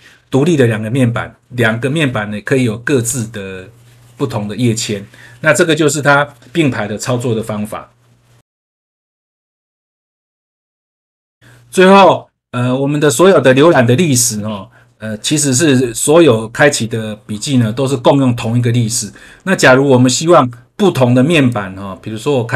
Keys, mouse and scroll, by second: 3.0 click, 5.9 scroll up 1, 8.4 F3, 21.3 click.